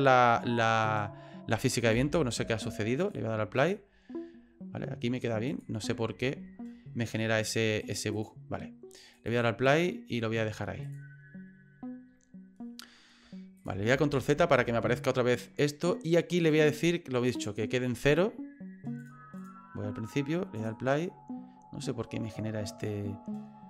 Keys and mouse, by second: 0.8 right click, 1.9 Delete, 3.0 click, 3.6 click, 5.5 click, 6.2 ctrl+z, 7.4 click, 7.8 click, 8.1 click, 9.2 click, 10.8 click, 13.6 click, 13.9 ctrl+z, 14.4 ctrl+z, 16.4 right click, 17.5-19.1 drag, 19.4 click.